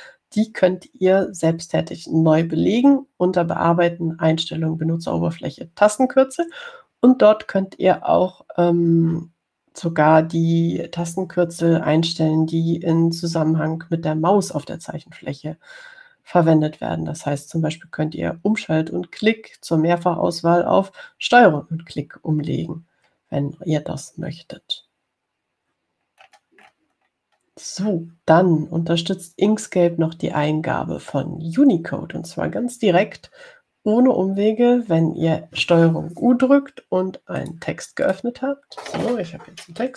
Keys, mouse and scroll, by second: 27.3-28.9 scroll down 4, 38.6 click, 39.3 click.